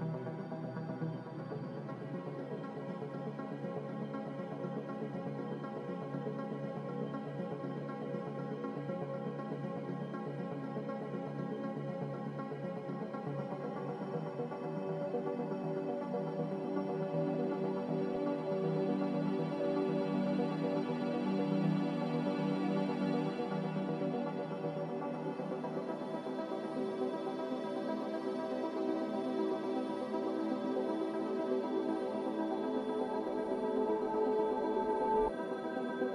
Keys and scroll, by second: 2.5 1, 2.7 0, 3.3 Return, 10.0 ctrl+z, 13.3 ctrl+z, 15.0 Return, 15.0 1, 15.0 0, 28.4 a, 31.2 ctrl+l.